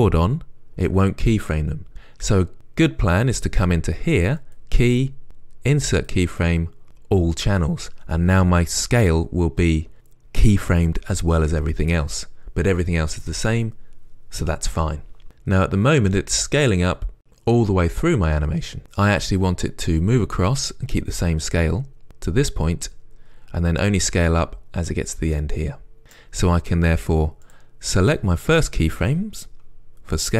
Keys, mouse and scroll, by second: 4.4-6.1 drag, 6.1 click, 7.3-8.2 drag, 15.1 drag, 15.3-27.7 right drag, 27.7 click.